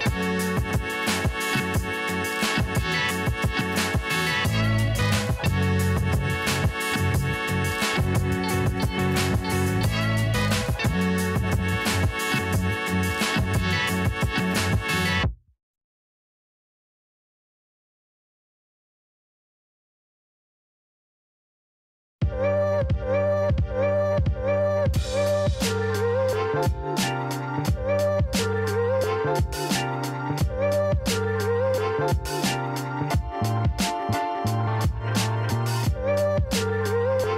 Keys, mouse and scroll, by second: 6.0-12.6 drag, 19.1 click, 20.8 click, 23.6 click, 24.4 click, 25.3 KP_0, 25.6 Return, 26.7 click, 28.1 click, 28.4 click, 29.8 KP_0, 30.0 KP_3, 30.3 Return, 31.5 click, 33.1 KP_0, 33.4 KP_2, 33.6 Return, 34.9 click, 35.7 KP_0, 36.1 Return, 36.9 click.